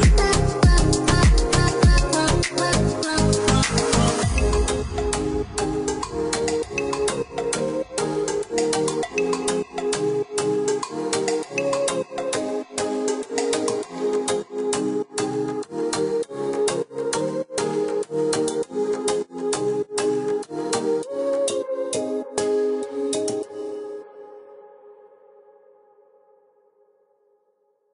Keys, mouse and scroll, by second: 1.9 click, 5.7 click, 6.7 click, 11.6 click, 15.0 click, 16.3 space, 16.8 click, 22.4-23.7 scroll up 1, 23.7 click, 26.2 click, 26.7 Escape, 27.7 click.